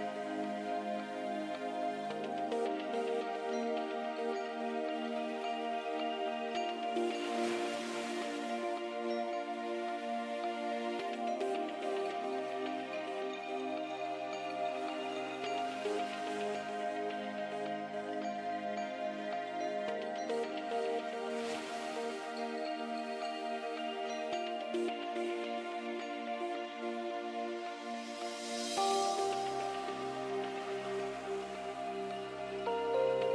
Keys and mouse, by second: 0.3-2.7 drag, 2.7 e, 6.8 e, 8.8 e, 10.2 e, 11.6 e, 12.7 e, 13.7 e, 16.4-28.2 middle drag, 28.2-29.8 drag, 28.2 right click, 29.8-32.1 middle drag, 32.1 e.